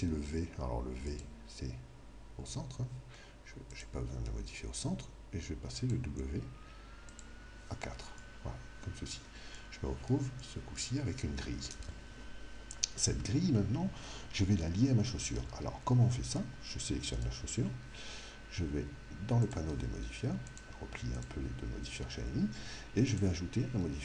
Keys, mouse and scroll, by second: 1.1 click, 3.7 click, 5.8-8.9 drag, 8.1-12.3 middle drag, 17.2 right click, 19.5-23.0 drag, 23.1 click.